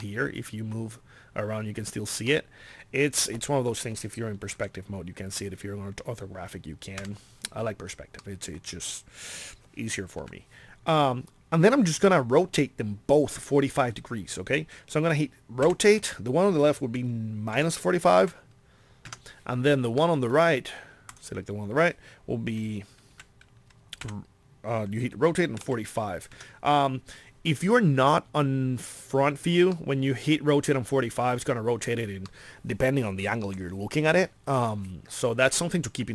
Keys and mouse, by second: 2.0 middle click, 4.6 KP_5, 10.2 KP_1, 15.7 r, 23.2 KP_1, 24.0 r, 29.7-31.2 middle drag, 34.2 middle click.